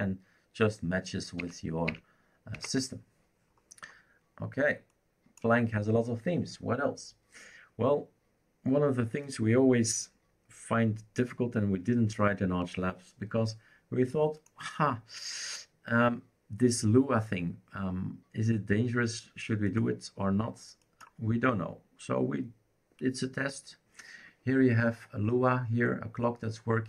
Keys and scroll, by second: 1.4 Up, 1.9 Up, 2.5 Down.